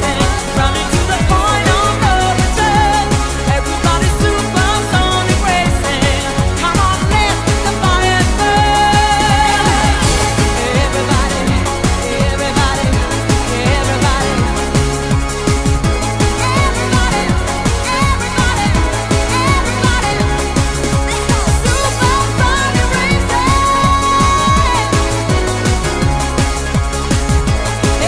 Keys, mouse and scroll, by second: 1.9 shift+right click, 4.5 ctrl+right click, 16.7 shift+right click.